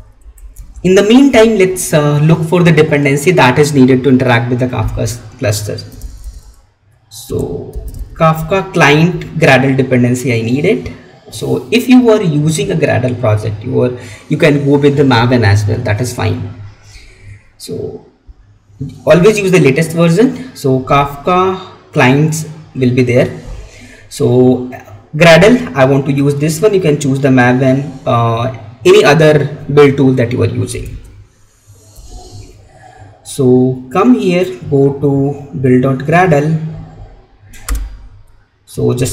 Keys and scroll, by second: 30.9 alt+Tab, 38.9 ctrl+v.